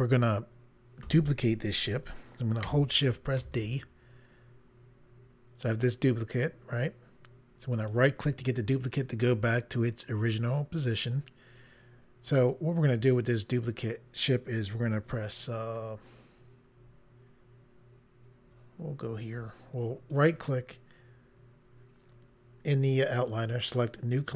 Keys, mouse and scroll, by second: 3.4 d, 7.7 right click, 20.1 right click, 23.6 click.